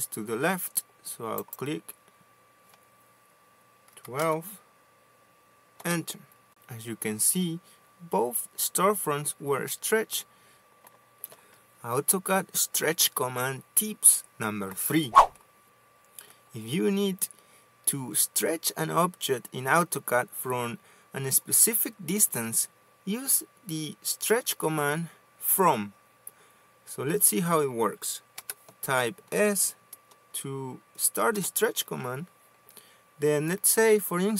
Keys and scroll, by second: 4.9-5.8 typing, 6.5 Return, 28.5 s, 31.5 Return.